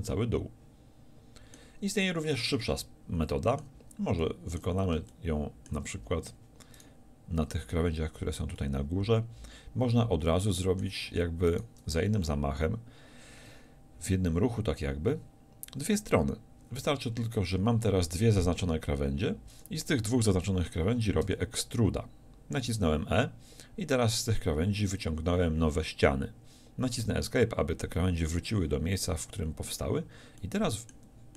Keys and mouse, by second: 6.8-8.6 drag, 10.6-11.6 middle drag, 16.8-27.0 middle drag, 16.8 z, 21.3 e, 30.4-31.3 middle drag.